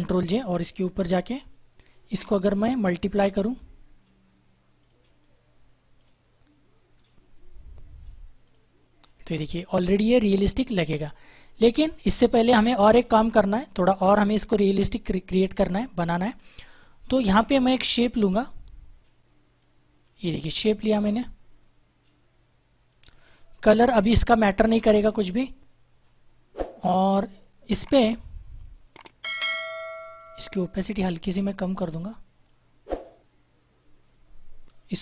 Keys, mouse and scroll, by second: 0.3 click, 4.7 click, 8.4 alt+click, 18.1 click, 30.1 click.